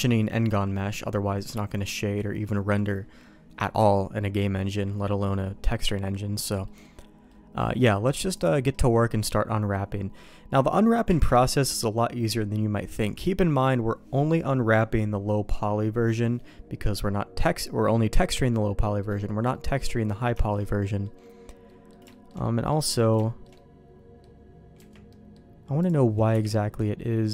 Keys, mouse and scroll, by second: 4.2 middle click, 5.0 middle click, 5.6 middle click, 6.1 middle click, 6.6 middle click, 7.2 middle click, 8.3 click, 8.7 middle click, 11.0 KP_Divide, 16.4 middle click, 18.4 middle click, 19.5 middle click, 20.0 middle click, 20.3 shift+middle click, 20.6 middle click, 21.6 middle click, 22.0 shift+middle click, 22.4 middle click, 23.1 shift+middle click, 23.5 middle click, 24.7 Tab, 25.0 middle click, 25.7 click, 26.3 KP_Decimal, 26.7 middle click.